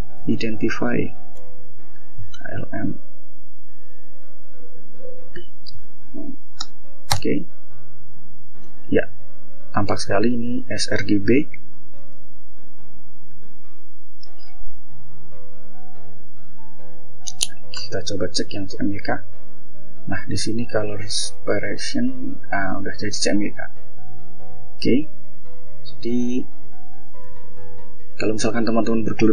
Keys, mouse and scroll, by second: 0.0-1.7 typing, 1.9 Tab, 3.7 Tab, 5.4 Right, 6.0 Return, 9.2 click, 10.2 click, 11.0 click, 11.8 click, 12.3-13.6 typing, 13.9 Up, 15.7 Tab, 16.7 Return, 21.5 click, 22.8 click, 23.4 click, 24.0 scroll up 2, 24.7-25.3 scroll down 4, 25.5 click, 26.4 ctrl+l, 27.6 click.